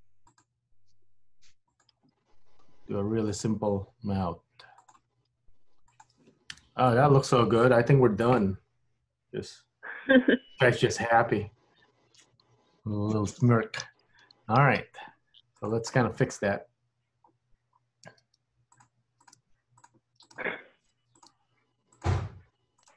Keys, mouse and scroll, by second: 7.9-8.5 scroll down 3, 8.5 middle click, 14.2 KP_1, 14.7-15.7 scroll up 3, 15.7 click, 18.1 g, 19.3 click, 19.5 g, 20.3 click, 20.5 g, 21.3 click, 21.5 g, 22.9 click.